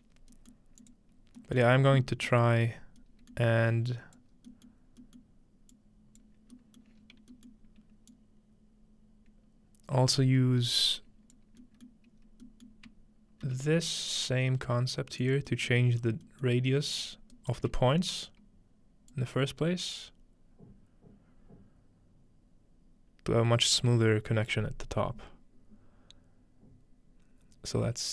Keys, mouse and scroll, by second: 0.2-0.6 scroll up 1, 2.4-4.4 scroll down 2, 4.4-12.4 drag, 4.4-5.7 scroll down 1, 6.5-8.1 scroll down 2, 8.1 scroll down 1, 8.4 scroll up 2, 12.4-12.9 scroll down 2, 12.5 click, 12.9 shift+click, 13.4 shift+middle click, 13.5 shift+d, 13.7 middle click, 14.1-14.4 scroll down 1, 20.4-28.1 drag.